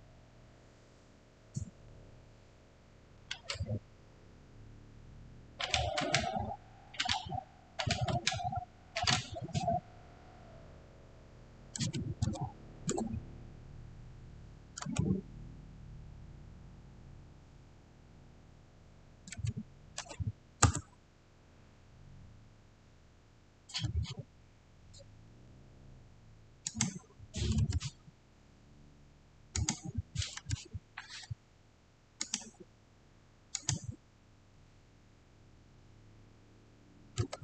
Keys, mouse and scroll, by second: 11.7 click, 11.8-12.1 typing, 12.8 Return, 13.2 \, 19.2-20.4 typing, 20.5 Return, 26.5 click, 29.4 click, 29.4 click, 32.1 click, 32.1 click, 36.9-37.4 typing.